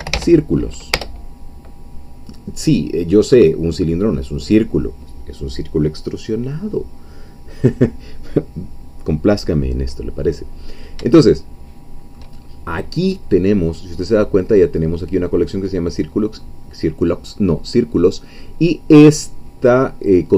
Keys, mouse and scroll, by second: 0.0-0.6 typing, 0.9 Return, 4.3 click, 11.2-12.3 shift+middle drag.